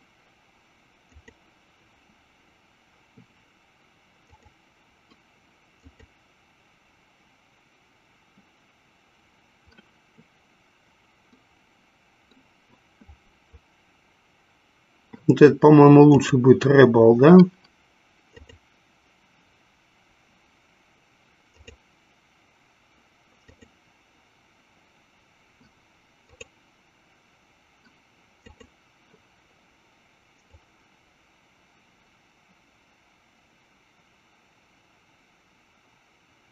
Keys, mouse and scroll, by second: 4.4-7.7 drag, 11.4-12.8 middle drag, 16.2-19.9 drag, 22.3-25.0 drag, 27.1-29.6 drag, 30.9-36.5 drag.